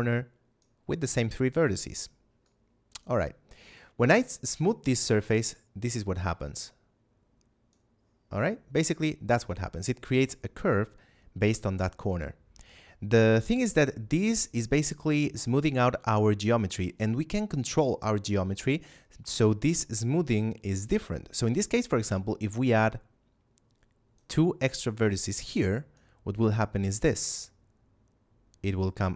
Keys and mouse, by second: 22.6 click.